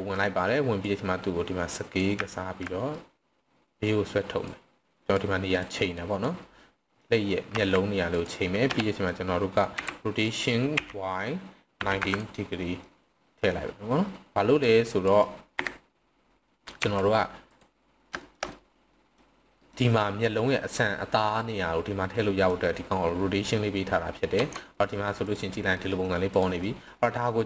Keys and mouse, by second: 0.8-2.0 drag, 2.1 z, 2.9-3.8 middle drag, 4.5-5.1 drag, 5.5-6.2 drag, 6.6-7.0 middle drag, 7.5 s, 8.1 click, 8.6 KP_1, 9.8 r, 10.7 y, 11.6 9, 11.9 0, 12.1 click, 12.8-13.4 middle drag, 14.6 click, 15.4 KP_7, 16.8 r, 17.5 click, 18.2 shift+middle click, 18.5-19.1 middle drag, 19.6 middle click, 20.5 middle click, 22.1-22.5 middle drag, 23.3 middle drag, 24.4 Tab, 24.7 middle click, 25.2 click, 25.8 middle click, 26.6 middle click.